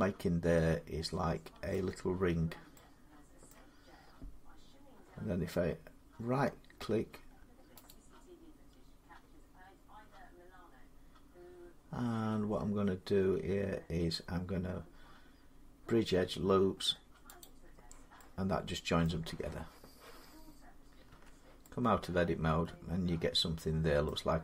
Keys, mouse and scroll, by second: 1.5 middle click, 3.3 middle click, 6.5-7.7 middle drag, 7.7-12.8 right drag, 17.2 click, 18.9 middle click, 20.9 Tab, 23.9 middle click.